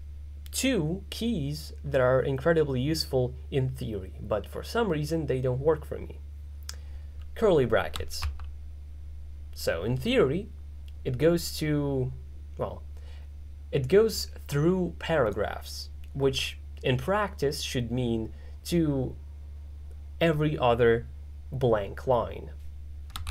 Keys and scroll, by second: 8.3 shift+[.